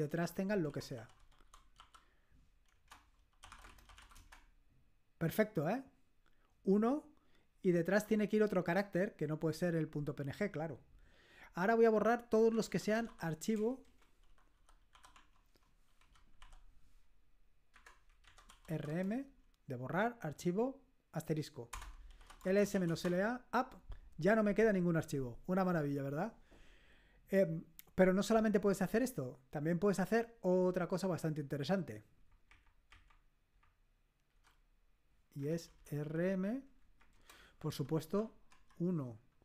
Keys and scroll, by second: 0.7-4.4 typing, 2.7 Return, 12.3-16.4 typing, 15.1 Tab, 17.7-19.1 typing, 18.2 Home, 21.8 Return, 21.9-23.2 typing, 32.2 Up, 32.4 Up, 32.9 Up, 33.5 Up, 34.3 Down, 35.4 Left, 35.6 Left, 35.7 Left, 35.9 Left, 36.1 Left, 36.8 Right, 37.1-39.0 typing.